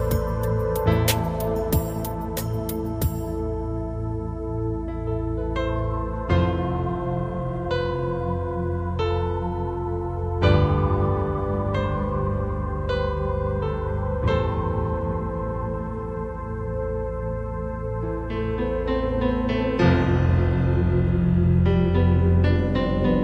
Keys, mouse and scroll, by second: 3.1 right click, 5.3 g, 9.1 click, 11.1 KP_1, 12.6 KP_5, 14.6 scroll down 2, 15.2 g, 16.4 click, 17.9 KP_3, 20.1 right click, 21.0 g, 22.7 click.